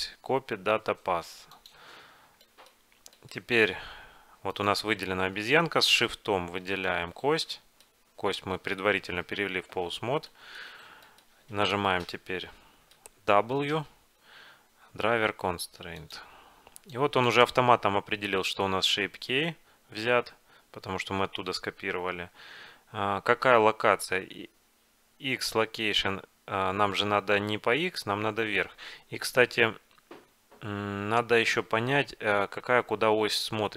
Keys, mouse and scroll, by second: 2.3-4.7 middle drag, 4.7 click, 4.7 right click, 5.5 click, 5.7-6.9 drag, 5.7-6.9 right drag, 7.2 right click, 7.6 click, 7.6 right click, 10.2-12.4 middle drag, 12.4-13.5 drag, 13.8 w.